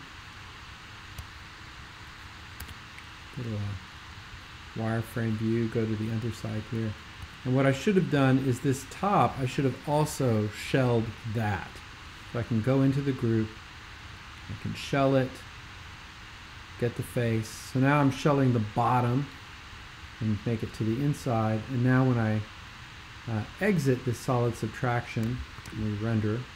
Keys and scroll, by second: 2.6 shift+super+w, 7.3 x, 25.6 shift+super+g.